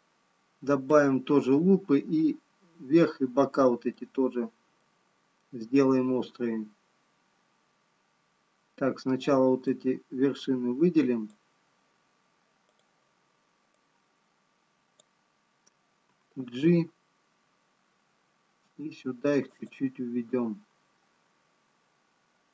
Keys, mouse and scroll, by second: 3.8-5.1 scroll up 2, 5.1 middle click, 5.1-6.3 scroll down 1, 10.5 click, 13.0 click, 17.2 g.